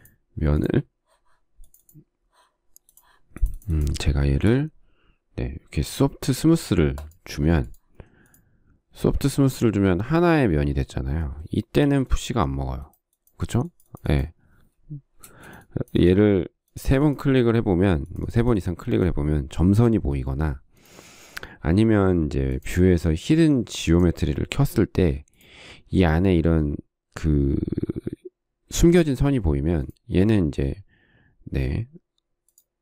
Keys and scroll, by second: 12.1 p, 15.5 space.